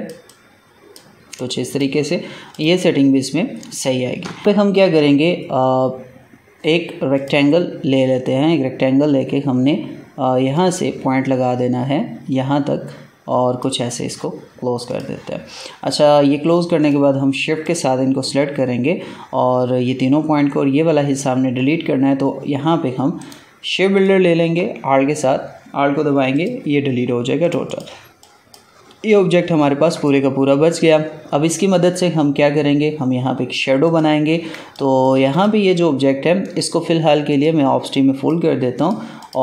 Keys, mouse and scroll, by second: 3.4-3.8 alt+scroll down 1, 4.4 click, 7.1 click, 10.5-14.8 drag, 16.7 shift+click, 23.1 right click, 23.9 click, 26.3 alt+click, 29.5 ctrl+z, 29.9 ctrl+click, 33.8 click, 34.5 ctrl+space, 34.7 ctrl+click, 34.9 ctrl+space, 35.2 click.